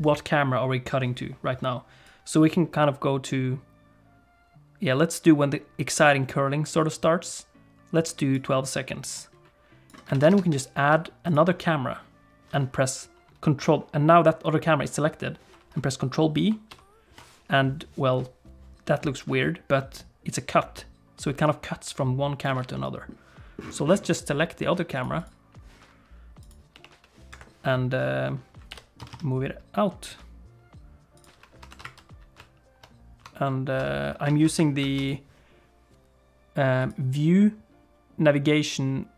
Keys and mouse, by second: 2.1-8.4 drag, 9.1 click, 10.1 alt+a, 16.7 ctrl+b, 20.0-22.5 drag, 22.7 middle click, 24.9 click, 26.5 click, 26.7 g, 28.7 g, 31.7 shift+f, 36.9-39.1 drag.